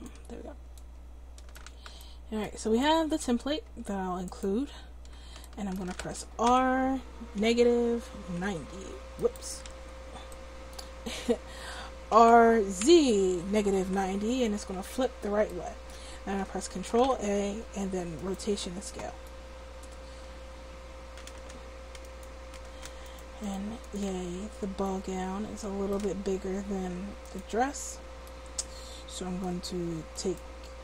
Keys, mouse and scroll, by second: 1.0-6.4 drag, 6.4 r, 9.2 r, 9.8 ctrl+z, 12.1 r, 14.6-16.5 drag, 16.5 middle click, 16.9 ctrl+a, 19.3 click, 22.1-25.0 drag, 25.0 middle click, 27.2-28.4 drag, 28.4 middle click, 30.3-30.8 right drag.